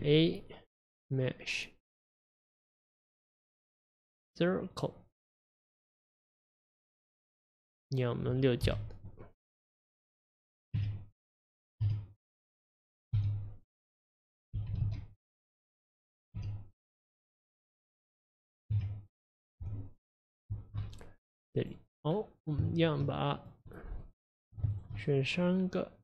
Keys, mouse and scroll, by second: 6.2 click, 7.5 scroll down 4, 8.7 KP_1, 10.8 Tab, 11.9 a, 13.2 z, 14.6 g, 16.4 s, 17.9 middle click, 18.8 Tab, 19.7 Tab, 21.6 click, 22.0 scroll up 5, 22.7 shift+middle click, 23.4 click, 23.7-24.7 middle drag, 24.7 shift+click, 25.0-26.0 middle drag.